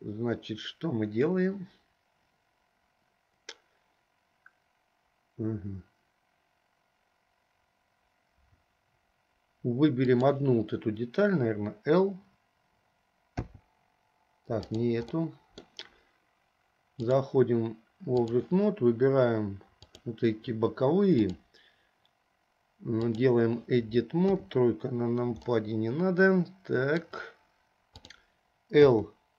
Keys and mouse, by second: 10.2 click, 13.6 l, 14.8 click, 15.4 middle click, 17.4-18.7 drag, 20.0 click, 21.3-23.5 drag, 24.4 KP_3, 25.7-27.1 middle drag, 27.1 click, 29.1 click.